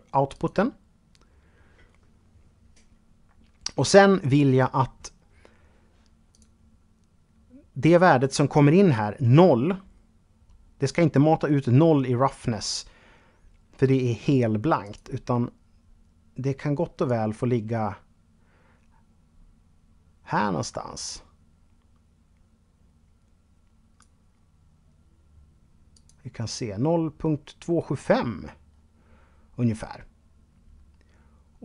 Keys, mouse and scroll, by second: 5.5 click, 14.0 click, 16.5-23.4 drag.